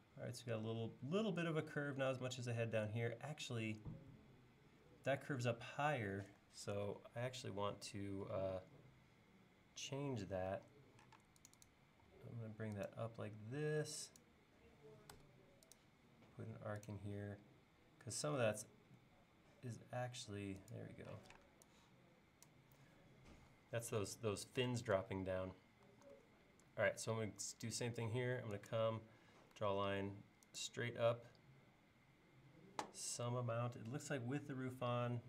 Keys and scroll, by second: 6.8 super+Tab, 11.2 l, 11.9 l, 15.2 a, 21.2 p, 25.9 l, 29.4 l.